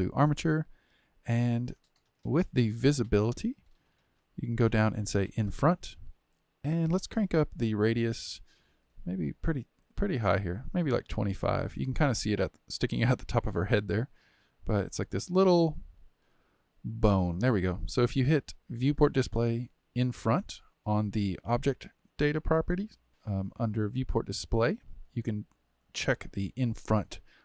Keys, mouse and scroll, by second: 3.0-4.0 drag, 4.0-5.4 scroll down 8, 5.4 click, 7.9-11.0 drag, 11.0-14.2 drag, 16.9 click, 24.0-25.6 drag, 25.6-26.8 scroll down 9, 26.8 click, 27.1 click.